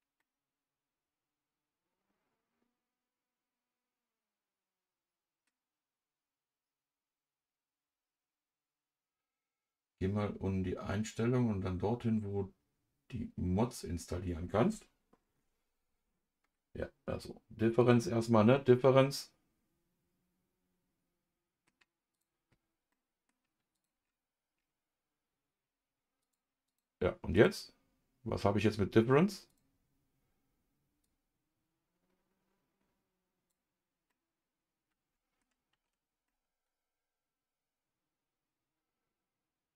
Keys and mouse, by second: 0.2-5.4 middle drag, 17.8 click, 18.5-21.7 middle drag, 22.9 middle click, 23.7 click, 26.2 click, 27.3 click, 29.5 click, 31.0-34.1 drag, 34.1-35.4 middle drag, 35.7 ctrl+z, 36.2-39.7 middle drag.